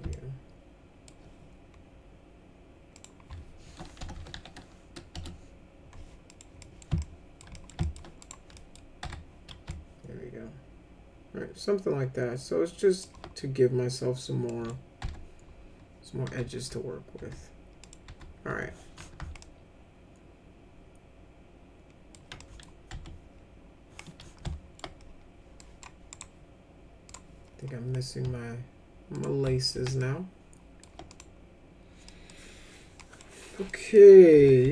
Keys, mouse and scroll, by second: 0.1 alt+middle click, 3.0 click, 3.9-4.8 typing, 6.3 middle click, 6.6 middle click, 7.0 alt+middle click, 7.6 middle click, 7.8 alt+middle click, 8.2 click, 8.6 middle click, 9.0 F4, 9.7-13.0 alt+middle drag, 14.5 middle click, 15.0 F4, 16.3 F4, 16.6 F4, 17.2 F4, 17.8 middle click, 18.1 F4, 18.5 F4, 19.4-22.1 alt+middle drag, 22.4 middle click, 22.9 F3, 24.5-24.8 alt+middle drag, 25.6 drag, 26.1 right click, 27.1 click, 29.2 ctrl+click, 29.7 alt+q, 30.0 alt+middle click, 31.1 click, 32.1 middle click, 33.0 middle click, 33.7 middle click, 34.4 F4, 34.6 F3.